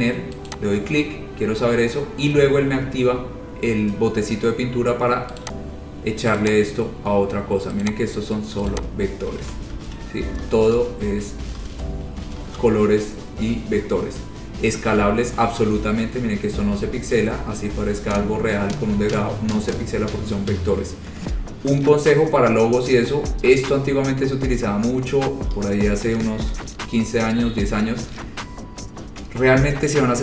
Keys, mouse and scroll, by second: 0.7 click, 5.6 click, 6.6 click, 7.0-7.8 scroll, 8.1 click, 8.9 click, 9.7 ctrl+z, 9.9 ctrl+z, 10.8 ctrl+z, 11.0 ctrl+z, 11.8 ctrl+z, 12.6 ctrl+shift+z, 14.5-21.1 scroll, 23.5-24.1 scroll, 29.1-29.6 scroll.